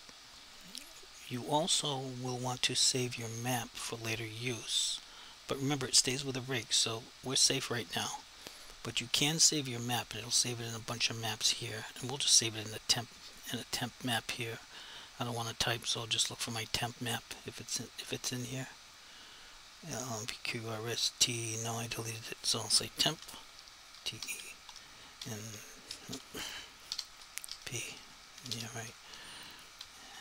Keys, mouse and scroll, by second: 9.2 click, 13.4 click, 18.0 click, 22.1 click, 24.0-28.4 typing, 29.8 m.